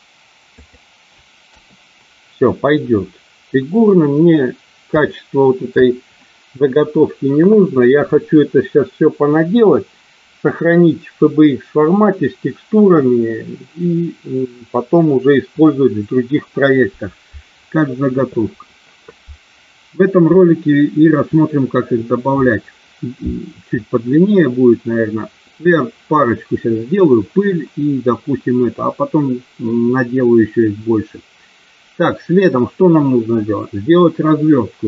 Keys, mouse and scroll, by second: 5.0 shift+middle click.